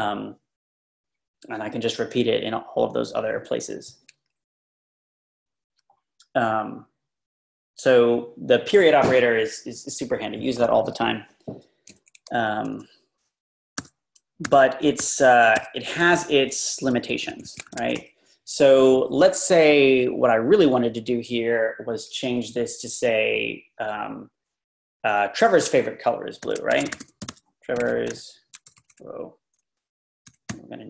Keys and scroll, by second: 13.8 u, 17.3 ↻, 17.7 shift+;, 18.0 Return, 22.3 Left, 26.3-28.9 typing.